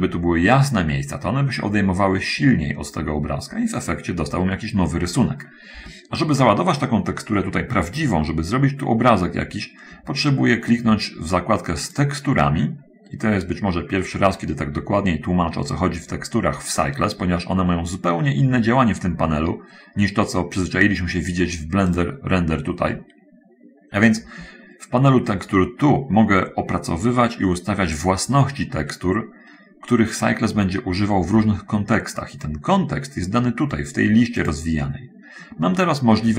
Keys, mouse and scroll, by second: 12.2 click, 22.3 click, 34.8 click.